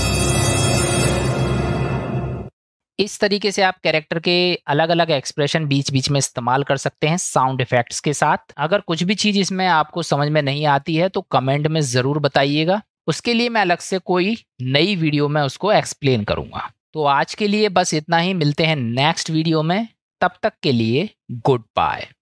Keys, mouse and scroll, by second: 10.8-11.7 middle drag, 12.9 click, 13.0 middle click, 13.1 click, 13.2 middle drag, 17.5 middle click.